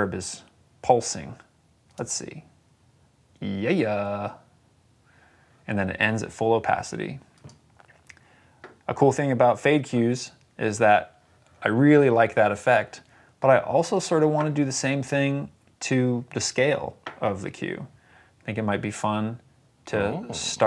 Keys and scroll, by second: 1.7 space.